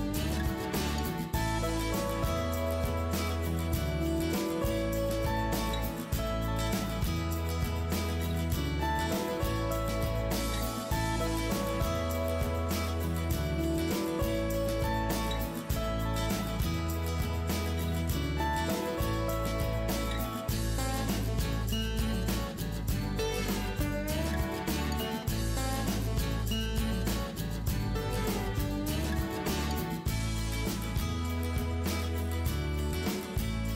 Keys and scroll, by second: 0.2 Return, 4.2 Return, 7.5 Return, 8.8 Return, 13.7 Return, 14.8 s, 16.4 Down, 16.7 Down, 17.2 Down, 17.3 Down, 18.0 Down, 18.4 Down, 18.5 Down, 19.1 Down, 19.3 Down, 20.0 Down, 20.2 Down, 20.3 Down, 20.4 Down, 20.9 Down, 21.0 Down, 21.1 Down, 24.1 KP_0, 24.6 KP_0.